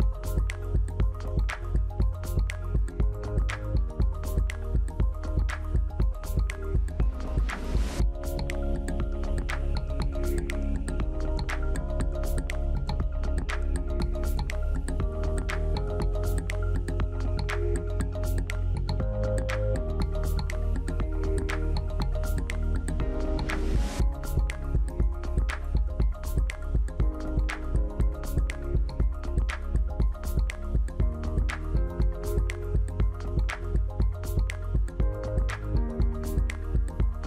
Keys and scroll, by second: 13.7 Down, 17.2 Down, 17.4 Left, 17.8 Down, 18.8 Left.